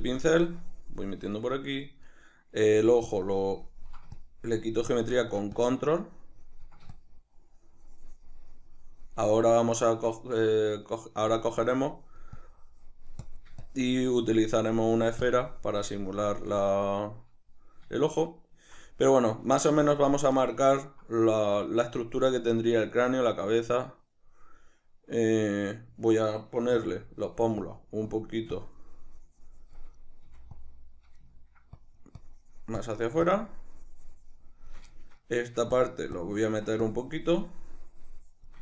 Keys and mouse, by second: 1.5-3.0 shift+middle drag, 3.0-9.7 ctrl+drag, 9.7-11.4 middle drag, 11.4-16.7 drag, 16.7-27.0 shift+middle drag, 26.7 f, 27.0 click, 27.6-30.7 drag, 30.3 f, 31.3 ctrl+middle click, 31.7-34.9 drag, 34.9 shift+middle click, 35.8-38.6 ctrl+drag.